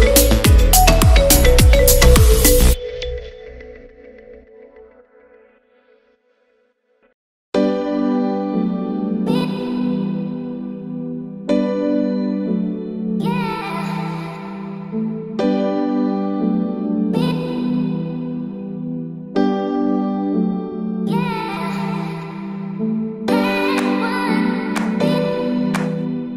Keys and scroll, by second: 5.6 ].